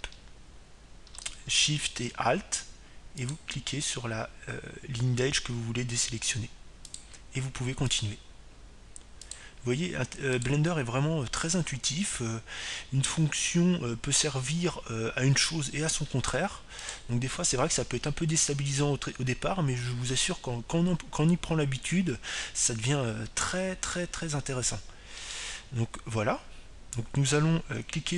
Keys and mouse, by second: 5.0-6.9 right drag, 8.6-14.3 right drag, 18.6-22.0 right drag.